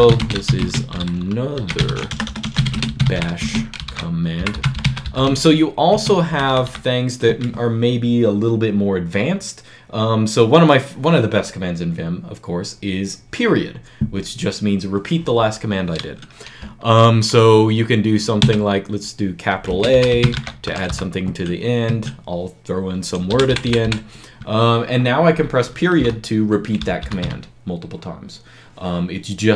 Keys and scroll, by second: 0.0-6.8 typing, 5.8 Escape, 18.2 shift+a, 19.5-20.7 typing, 21.7 Escape, 23.1 b, 23.3 b, 23.5 b, 23.6 b, 25.8 ., 26.8 ., 27.0 ..